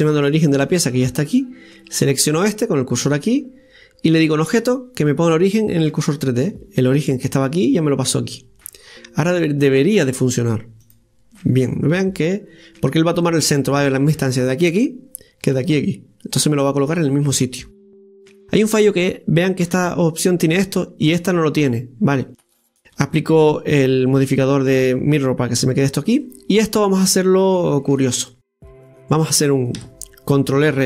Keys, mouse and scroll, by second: 1.9-4.4 right drag, 4.4-7.4 drag, 9.9 click, 10.8 click, 17.5 scroll up 1, 24.2 click, 26.2-27.8 right drag, 27.8-29.8 scroll down 2, 28.2-29.8 middle drag, 29.8 Tab.